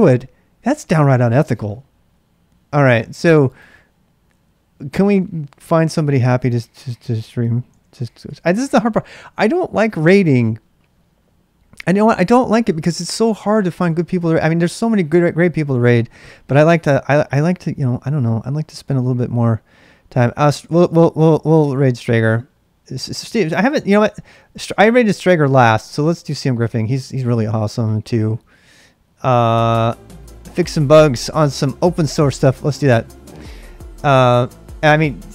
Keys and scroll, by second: 7.5-10.0 typing, 12.1 Return.